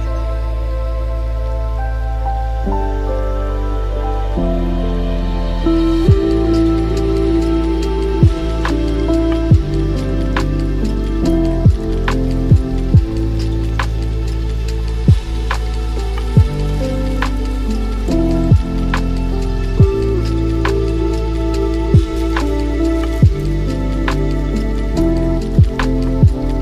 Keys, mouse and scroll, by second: 1.0-3.4 middle drag, 3.4-8.0 shift+drag, 8.0-8.4 scroll down 3, 8.4-9.7 middle drag, 9.7 click, 11.2-18.4 drag, 19.8-22.7 drag, 22.7-23.1 scroll down 4, 23.1-24.6 middle drag, 24.6-26.3 drag, 26.3-26.6 middle drag.